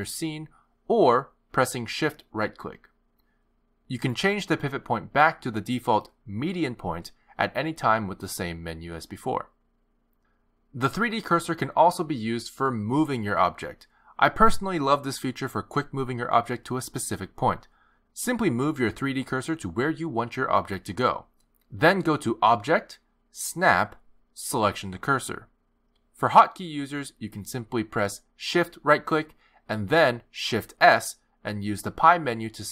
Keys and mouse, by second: 1.6 shift+right click, 2.4 shift+right click, 2.7 click, 3.5 s, 6.0 r, 9.2 click, 17.2 shift+right click, 18.4 shift+right click, 20.2 shift+right click, 20.9 shift+right click, 23.3 click, 28.9 shift+right click, 30.7 shift+s.